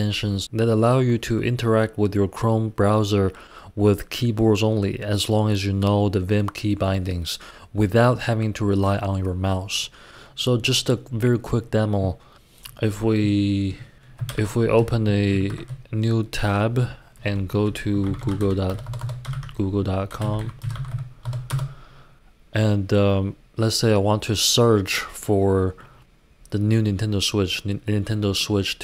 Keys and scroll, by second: 14.3 super+l, 14.9 ↻, 15.3 super+t, 17.6-21.9 typing.